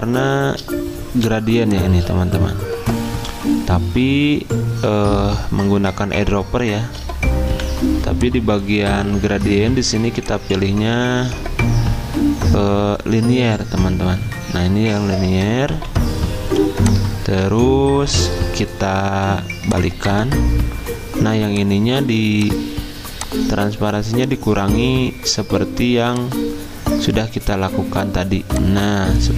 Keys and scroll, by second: 0.0 i, 7.5 v, 15.7 g.